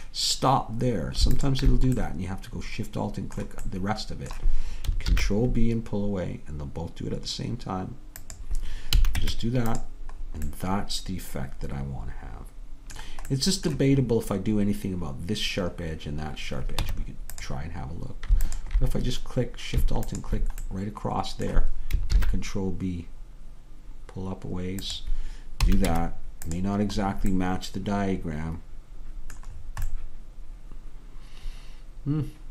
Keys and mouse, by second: 5.1 ctrl+b, 9.0 a, 9.2 Tab, 16.9 Tab, 20.1-22.2 drag, 20.8-22.2 middle drag, 20.8-22.2 right drag, 22.2 ctrl+b, 25.9 Tab.